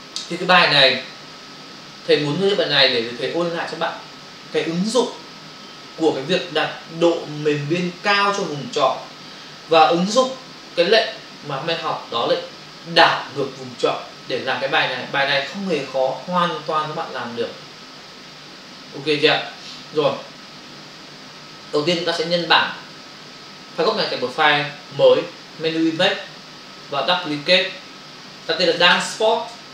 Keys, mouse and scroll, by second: 22.3 click, 25.8 click, 27.2 click.